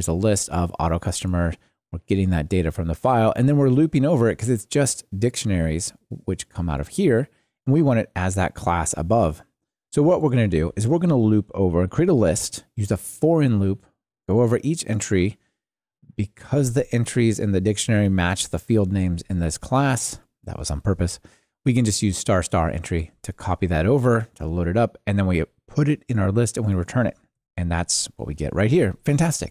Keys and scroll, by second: 27.4 ctrl+r.